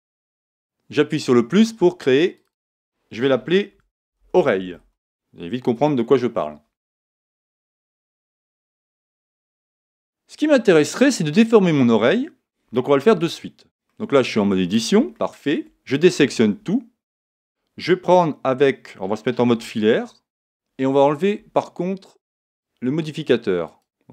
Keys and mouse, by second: 1.1-4.5 drag, 4.7 l, 7.6-9.5 middle drag, 13.1 Tab, 13.9-18.6 middle drag, 16.1 a, 19.4 z, 22.5-24.1 drag.